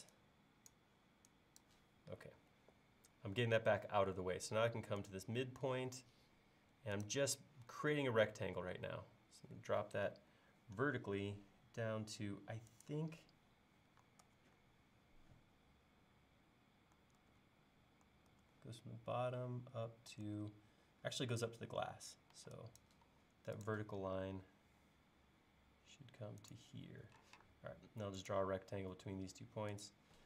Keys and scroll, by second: 2.3 l, 12.1 typing, 12.2 Up, 14.3 super+Tab, 17.2 super+Tab, 18.3 super+Tab, 20.3 super+Tab, 22.4-23.6 typing, 24.4 Up, 27.3 r.